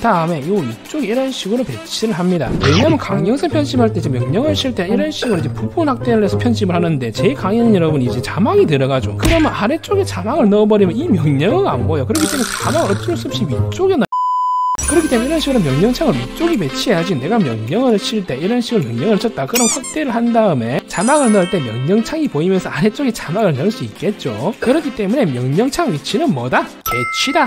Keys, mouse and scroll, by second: 0.1-1.5 drag, 6.7 click, 18.1 right click, 20.1 scroll up 2.